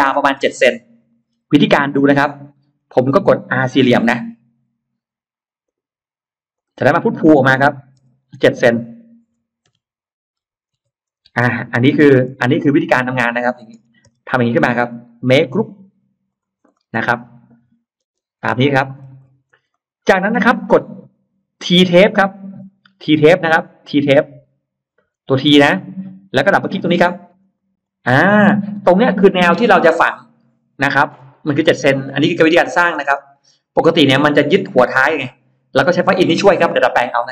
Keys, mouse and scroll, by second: 1.1-1.4 scroll down 2, 1.5-2.5 scroll up 2, 2.7 scroll up 2, 3.5-3.9 scroll up 4, 3.9 middle click, 4.7 r, 5.5 click, 6.4 click, 7.8 p, 8.3 click, 9.5 7, 10.3 c, 11.1 Return, 11.1 m, 12.2 space, 12.3 middle click, 12.8 click, 13.1 click, 13.6 middle click, 13.9 click, 13.9 m, 14.7 click, 15.1 right click, 16.1 click, 16.6 middle click, 17.0 click, 17.9 space, 18.3 click, 18.7-19.8 scroll up 2, 19.7 middle click, 19.9-20.3 scroll down 1, 20.4-20.7 scroll up 1, 27.3 click, 29.0 middle click, 29.0 space, 29.5-30.9 middle drag, 29.5 scroll up 1, 29.9 scroll down 1, 31.1 scroll down 1, 31.6-32.2 scroll up 1, 32.3 middle click.